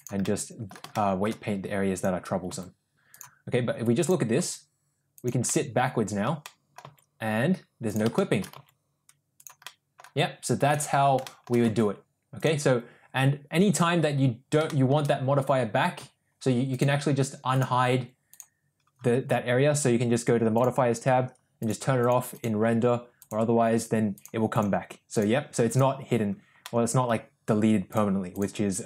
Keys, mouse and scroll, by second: 0.2 middle click, 1.0 middle click, 2.2 click, 2.6 g, 4.5 g, 5.5 middle click, 6.5 middle click, 6.9 g, 8.2 shift+middle click, 8.6 g, 9.7-10.0 middle drag, 11.0 click, 11.3 middle click, 11.8 g, 14.7 middle click, 16.8 click, 20.6 drag, 21.7 click, 22.1 click, 23.2 click, 24.2 click, 24.6 click, 25.2 click, 25.7 click, 26.6 middle click, 28.0 click, 28.3 click.